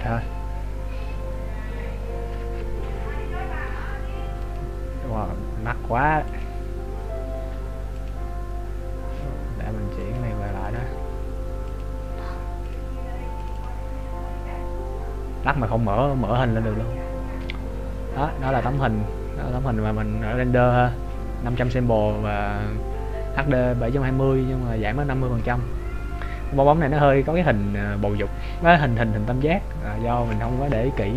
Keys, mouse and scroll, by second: 10.1 click.